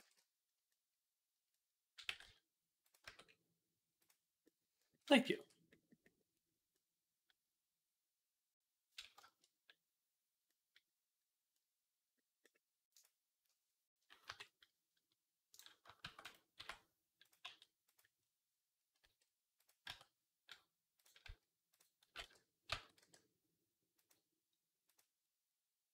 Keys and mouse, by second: 1.9 g, 2.9 Tab, 3.8 click, 3.9-5.5 middle drag, 5.2 ctrl+s, 5.7-7.4 middle drag, 7.4-9.0 drag, 9.0-15.9 shift+middle drag, 12.8-14.1 drag, 14.1 KP_3, 15.4 click, 15.9 shift+d, 16.4 r, 17.3 g, 18.8 r, 19.7 Tab, 21.1 z, 21.9 x, 22.5 a, 23.8 middle click, 23.8 e, 24.8 click.